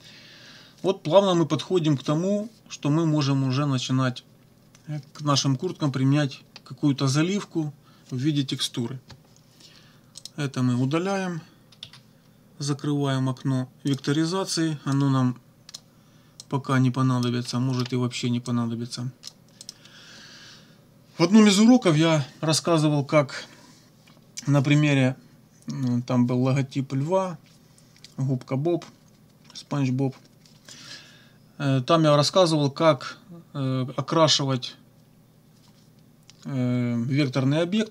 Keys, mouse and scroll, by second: 10.2 click, 11.8 Delete, 13.9 click, 14.9-15.9 drag, 16.4-17.4 drag, 17.5 click, 17.5 right click, 18.5 click, 19.6 click.